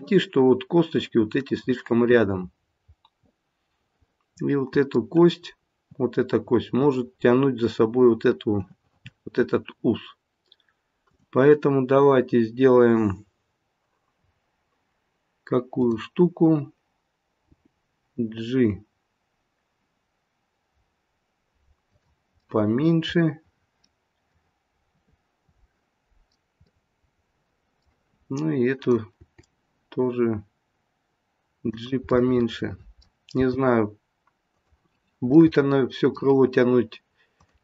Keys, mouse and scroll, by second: 0.7-1.4 scroll up 1, 1.4 middle click, 2.4 middle click, 3.6 middle click, 5.5-6.8 scroll down 1, 6.8-8.0 scroll down 1, 11.1 click, 15.8 click, 15.8-17.4 scroll down 3, 17.4 g, 22.3 middle click, 26.6 middle click, 28.8 click, 29.2 g, 32.0 middle click, 33.4 g, 35.2 middle click, 37.3 click.